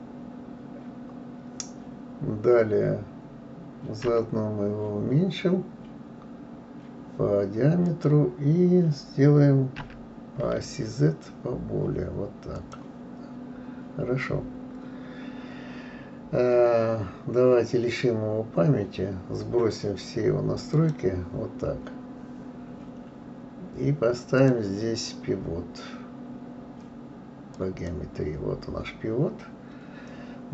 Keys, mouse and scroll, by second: 4.1 s, 9.8 s, 20.7 click, 24.4-27.4 drag.